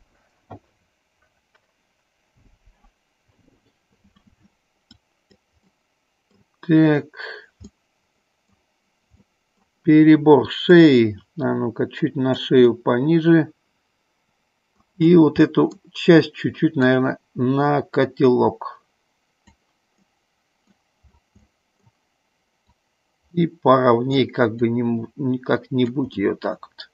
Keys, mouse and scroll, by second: 5.2 click, 5.9 middle click, 7.8 middle click, 9.4 middle click, 10.9-12.6 drag, 12.8-15.0 middle drag, 15.6 middle click, 16.9-19.6 drag, 20.2 middle click, 21.6 middle click, 22.9-24.3 drag, 24.9-26.1 drag, 26.2-26.9 middle drag.